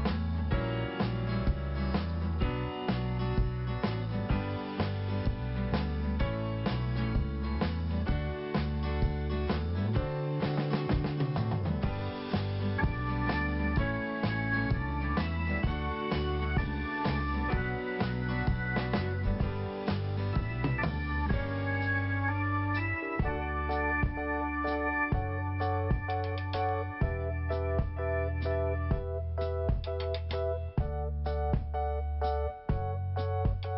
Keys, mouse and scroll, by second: 0.0 click, 1.0 click, 2.2 click, 8.3 click, 8.4 click, 10.4 click, 13.2 scroll down 1, 15.7 p, 16.8 click, 16.9 click, 17.3 click, 17.3 double click, 18.0 double click, 22.5 scroll down 1, 25.9 scroll down 1, 26.0 click, 29.1 5, 31.0 click, 31.1 click, 32.0 click, 33.4 click, 33.4 click.